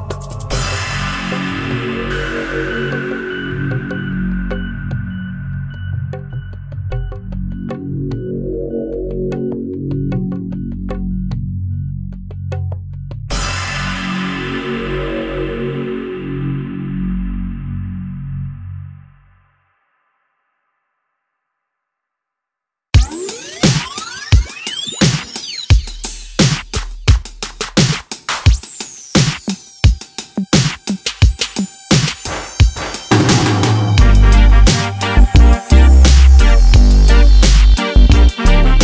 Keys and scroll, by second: 1.8 ctrl+e, 8.2 ctrl+r, 14.5 ctrl+e, 32.0 alt+z, 36.4 alt+z.